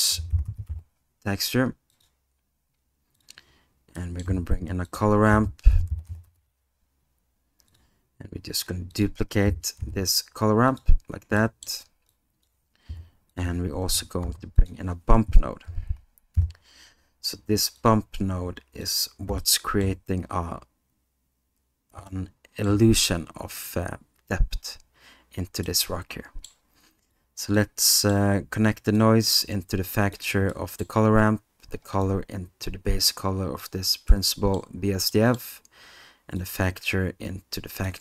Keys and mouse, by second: 4.0 middle click, 10.7 shift+click, 11.6 shift+middle click, 12.1 shift+click, 12.9 g, 19.6 middle click, 22.2 middle click, 25.8 middle click, 27.1 click, 28.0 middle click, 29.0-30.1 drag, 30.6 middle click, 32.0-33.7 drag, 34.3 middle click, 35.2 middle click, 36.4-37.9 drag.